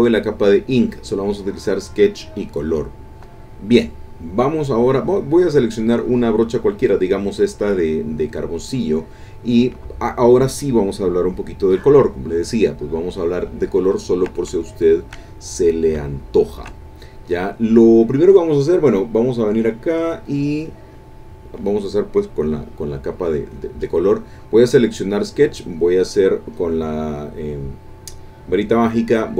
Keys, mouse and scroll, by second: 2.8 middle click, 5.8 click, 12.3-13.4 drag, 13.6 middle click, 13.9 ctrl+click, 14.5 ctrl+shift+click, 14.7 shift+middle click, 15.1 shift+click, 16.1-17.3 shift+drag, 20.1 click, 20.6 click, 23.5 click, 24.9 click.